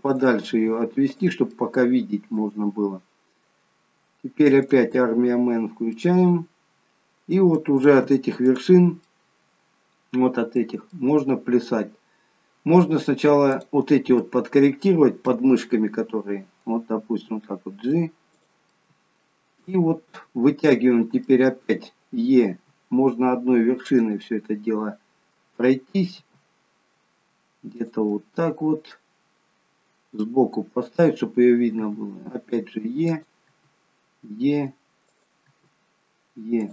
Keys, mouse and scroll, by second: 0.0 click, 0.5 g, 1.4 middle click, 5.5 click, 5.5-5.9 scroll down 2, 5.9 middle click, 8.4 click, 10.9 middle click, 10.9-11.4 scroll up 1, 11.8 scroll down 1, 13.6 click, 14.2 middle click, 16.9 g, 18.7 middle click, 20.6 middle click, 22.6 e, 24.2 middle click, 26.1 g, 28.2 middle click.